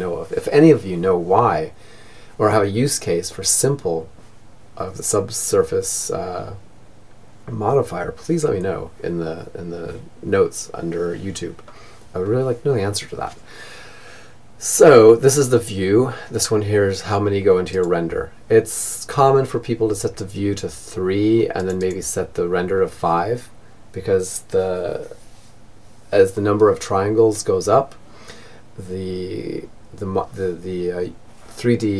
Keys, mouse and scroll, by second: 31.2-31.9 middle drag.